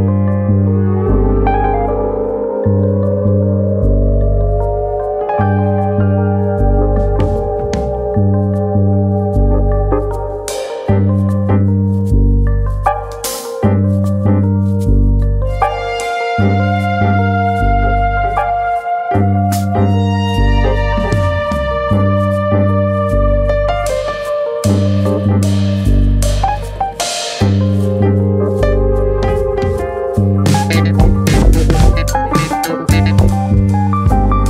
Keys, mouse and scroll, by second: 0.4-0.7 scroll up 2, 0.7 scroll down 1, 1.0 middle click, 1.3 scroll up 1, 1.5 shift+middle click, 3.7 click, 7.8 click, 8.3 scroll up 1, 8.5 click, 8.7 shift+middle click, 9.6 r, 12.3 click, 12.5 middle click, 13.0 s, 14.2 click, 14.3 middle click, 14.9-15.5 scroll down 3, 15.3 click, 15.7 shift+middle click, 16.0-16.6 scroll down 2, 16.3 middle click, 18.5-19.6 scroll up 5, 19.2 shift+middle click, 19.4 middle click, 19.6 click, 19.9 Tab, 20.2-21.1 scroll up 2, 21.6 3, 21.8 click, 22.4 middle click, 22.7 scroll up 1, 22.9 middle click, 26.0 KP_1, 27.5 shift+d, 28.6-28.9 scroll up 1, 28.9 middle click, 31.8 click, 33.7 middle click, 34.2 shift+middle click.